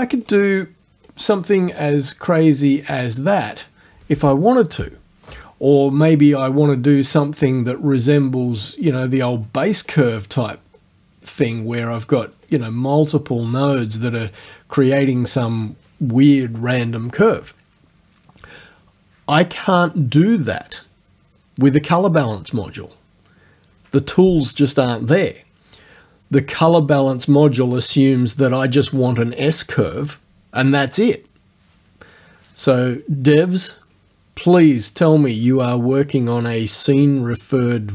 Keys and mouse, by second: 0.7 click, 1.5 click, 2.5 click, 7.3-8.3 drag, 9.0-10.1 drag, 10.8-12.7 drag, 13.4-15.4 drag.